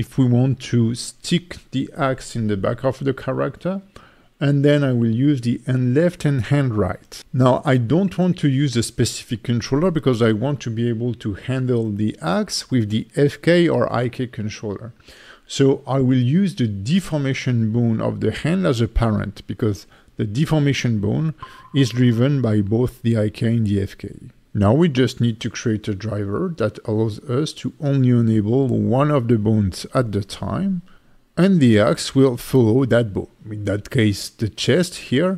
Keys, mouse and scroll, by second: 0.4 click, 3.1 click, 4.5 click, 19.9 ctrl+c, 20.5 click, 21.8 ctrl+v, 22.1 click, 26.3 click, 27.2 click, 28.5 click, 31.7 click, 32.5 click, 33.0 r, 34.9 right click.